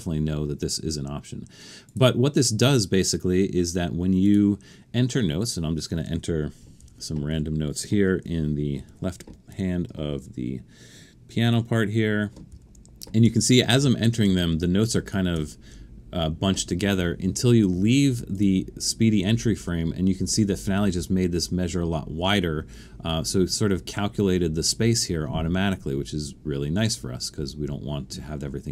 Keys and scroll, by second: 6.8-7.3 typing, 8.9-10.1 typing, 12.5-13.3 typing, 16.9 typing.